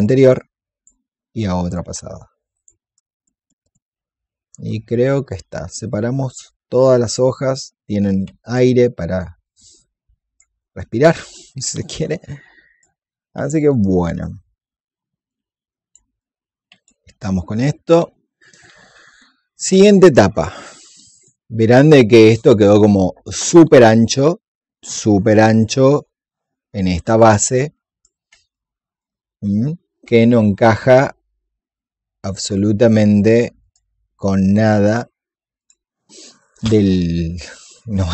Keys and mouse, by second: 0.2-3.6 drag, 3.9-10.3 drag, 10.7 alt+click, 12.0 click, 13.4 alt+click, 15.2 click, 17.1 alt+click, 17.9-22.9 drag, 27.1 click, 28.4 alt+click, 33.5 click.